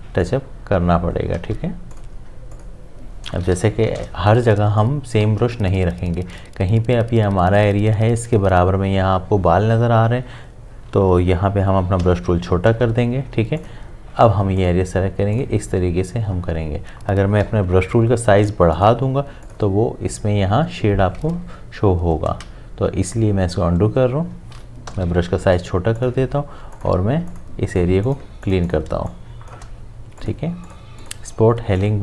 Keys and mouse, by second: 1.3 ctrl+z, 1.9 click, 4.6 space, 4.8 click, 5.1 space, 12.0-12.9 typing, 13.6 click, 17.5-18.4 typing, 18.7 click, 22.2 click, 22.3 ctrl+z, 24.9-25.6 typing, 26.0 click, 28.9 space, 29.1 click, 29.4 space, 30.2 click.